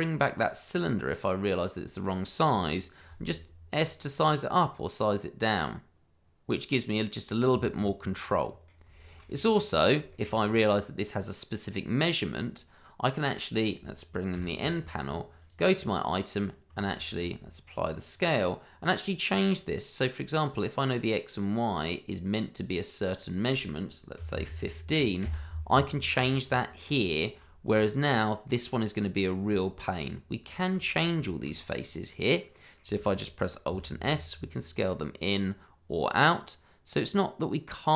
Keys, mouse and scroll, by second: 3.1 s, 7.2 click, 7.7 middle click, 9.0 shift+middle click, 9.2-9.5 scroll up 1, 9.5 middle click, 10.1 shift+middle click, 10.1 middle click, 14.3 n, 15.4 click, 17.0 ctrl+a, 18.1 click, 22.1 click, 24.1 1, 24.3 5, 25.2 Return, 26.2-26.9 scroll down 1, 27.1 shift+middle click, 27.2 middle click, 27.2 shift+middle click, 27.6 click, 28.0-28.4 scroll up 1, 28.4 middle click, 29.4 Tab, 31.2 middle click, 31.5-31.8 scroll up 1, 31.8 middle click, 33.1 shift+middle click, 34.0 alt+s.